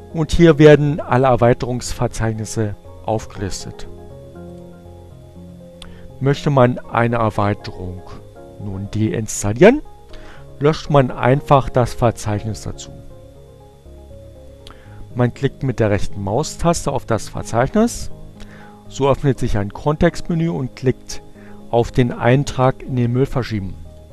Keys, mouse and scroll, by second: 3.9 click, 14.2-15.5 right drag, 21.8 click.